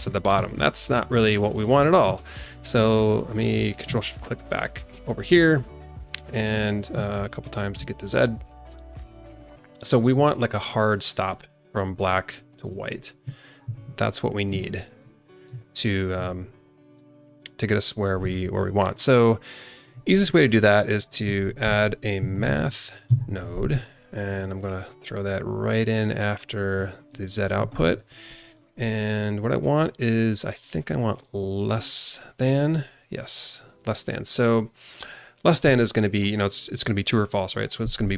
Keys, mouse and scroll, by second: 0.3 ctrl+d, 0.9 alt+middle click, 1.8 scroll down 1, 4.4 ctrl+shift+click, 5.7-6.2 drag, 7.1 ctrl+shift+click, 7.4 ctrl+shift+click, 9.6 alt+middle click, 10.6 click, 11.0 click, 11.9 click, 12.6 click, 13.6 ctrl+d, 14.2 scroll up 1, 14.6 shift+middle click, 15.5 middle click, 21.0 click, 21.4 ctrl+shift+a, 26.7 click, 27.3 scroll up 2, 27.6 shift+middle click, 28.5-29.6 scroll up 1, 29.6 click, 31.0 click, 35.0 click.